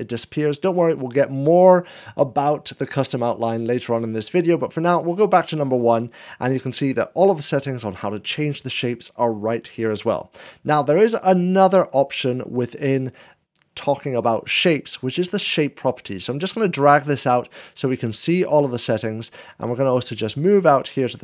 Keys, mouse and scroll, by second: 4.6-6.5 drag, 12.4 scroll down 1, 13.3 scroll down 1, 16.8-18.5 drag, 17.0 scroll down 1, 19.3-20.3 middle drag, 20.5 scroll up 1, 21.1 scroll down 1.